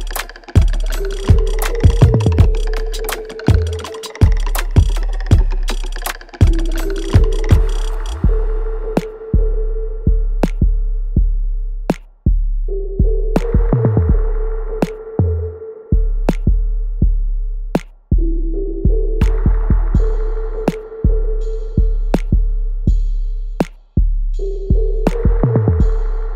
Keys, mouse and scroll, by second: 0.1 click, 1.1 alt+right click, 1.6-3.5 alt+drag, 4.3 alt+click, 5.3 ctrl+b, 6.5 click, 7.6-9.2 ctrl+drag, 9.2 right click, 9.8 click, 10.0 alt+right click, 10.5 alt+click, 11.6 alt+right click, 12.3 alt+click, 13.0 alt+right click, 13.3-17.2 alt+drag, 17.2 alt+right click, 17.7 alt+click, 18.5 alt+right click, 18.8 alt+click, 19.4 alt+right click, 19.8 alt+click, 20.2 alt+right click, 20.7-22.4 alt+drag, 22.4 alt+click, 23.9 alt+right click, 24.3 alt+click, 24.9 alt+middle click, 25.5-26.3 alt+drag.